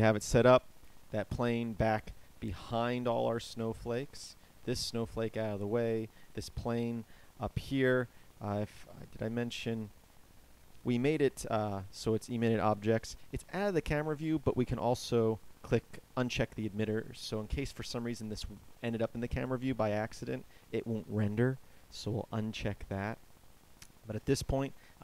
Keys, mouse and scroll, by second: 1.9-8.7 middle drag, 24.1 KP_0.